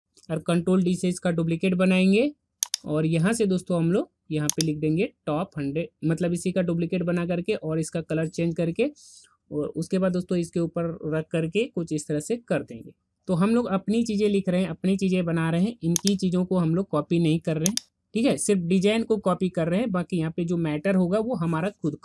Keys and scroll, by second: 0.9 ctrl+d.